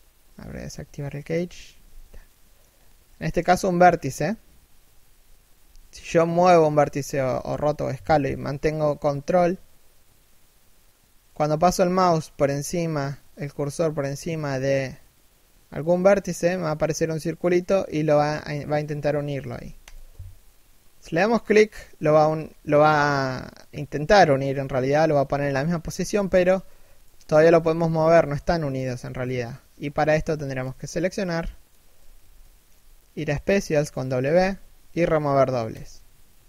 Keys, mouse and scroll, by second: 1.9 middle click, 2.4 scroll up 1, 2.6 scroll down 1, 2.7 middle click, 5.3 g, 21.2 middle click, 22.0-24.1 scroll up 1, 24.1 scroll down 1, 24.4 z, 24.7 scroll up 1, 25.5-26.0 scroll up 1, 26.0 g, 27.7 right click, 27.8 g, 29.0 scroll down 1, 29.7 a, 30.0 b, 32.0 middle click, 33.9 w.